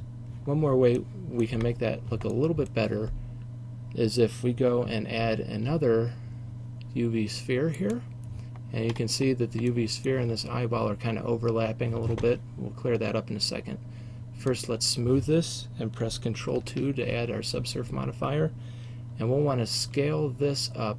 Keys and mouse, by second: 0.0 Escape, 1.1 middle click, 1.3 middle click, 5.3 shift+a, 9.8 middle click, 10.2-14.6 right drag, 14.6 click, 15.1-16.7 middle drag, 16.7 ctrl+2, 19.9 s.